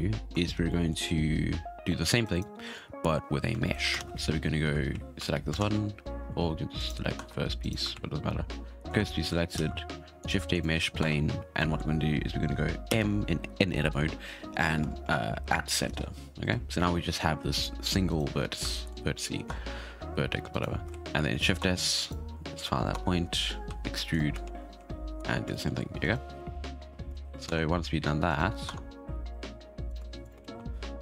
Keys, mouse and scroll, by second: 0.1-0.6 scroll up 2, 0.6-2.2 shift+middle drag, 2.2 right click, 3.9 shift+a, 4.9 shift+s, 5.5 shift+a, 6.7 right click, 7.1 Tab, 7.6 right click, 7.9 shift+s, 8.9 Tab, 9.5 shift+a, 11.0 Tab, 11.3 scroll down 6, 11.6 middle click, 12.1-12.9 scroll down 4, 12.9 m, 15.0 Down, 16.8-17.3 scroll up 7, 17.3 g, 18.3 scroll up 5, 18.7-19.4 shift+middle drag, 19.4 Tab, 20.5 right click, 20.9 shift+s, 21.6 Tab, 22.0 right click, 22.9 Tab, 23.6 e, 24.4 shift+s, 25.1 Tab, 25.5-26.0 shift+middle drag, 26.0 right click, 26.3 right click, 26.7 Tab, 27.1 shift+s, 27.4 Tab, 28.2 right click, 28.6 Tab, 29.4 e, 30.4 shift+s, 30.8-31.0 scroll down 3.